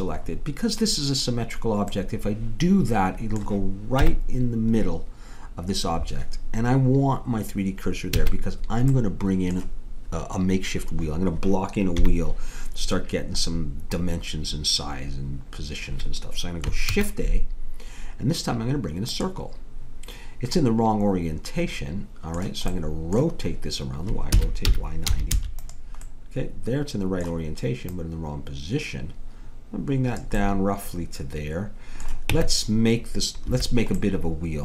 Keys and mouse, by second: 0.6-2.1 middle drag, 2.1 click, 4.0 KP_1, 8.2 a, 12.0 KP_1, 17.0 shift+a, 20.6-24.4 middle drag, 24.4 r, 27.9-29.9 drag, 30.4 middle click, 32.3 Tab.